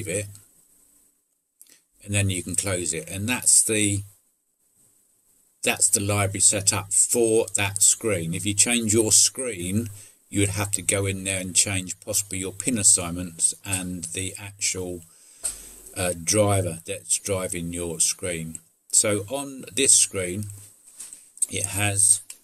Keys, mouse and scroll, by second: 1.0 click, 2.5 click, 4.3 click.